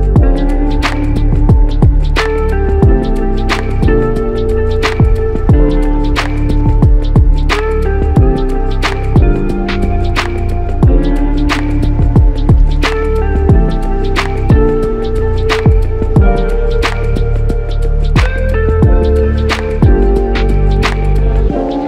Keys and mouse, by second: 0.0-0.3 typing, 2.7 double click, 4.8 typing, 5.9 double click, 10.0 shift+click, 15.3 double click, 20.1 shift+click, 21.2 double click.